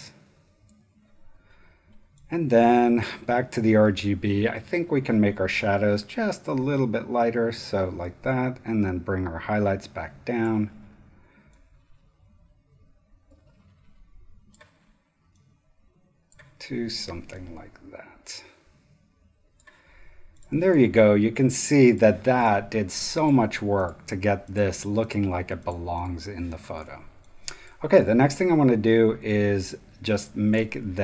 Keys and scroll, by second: 20.6 space, 26.7 space, 27.5 super+space, 28.9 v, 28.9 v, 29.3 space, 30.2 super+space.